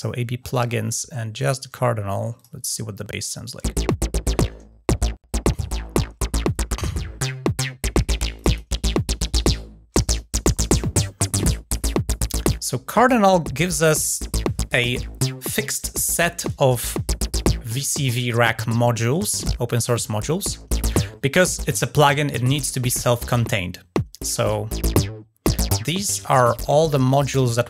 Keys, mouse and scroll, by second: 0.2-0.5 scroll up 4, 1.2 click, 3.0 click, 8.1 click, 9.3 middle click, 11.2 ctrl+scroll down 2, 11.6 middle drag, 11.9 middle click, 12.7 scroll down 1, 13.0-13.4 middle drag, 24.2 right click, 26.5-27.6 drag.